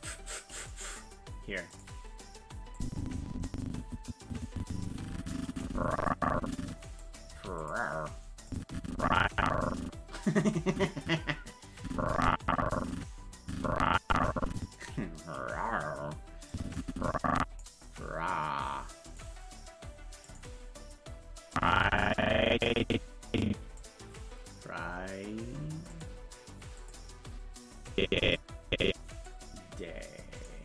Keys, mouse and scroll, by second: 0.6 click, 1.7 click, 2.8-7.0 drag, 7.3 i, 8.5-14.7 drag, 16.5-17.6 drag, 19.1 click, 20.2 click, 21.5-23.8 drag, 26.0 click, 26.8 click, 27.9-29.3 drag, 30.4 click.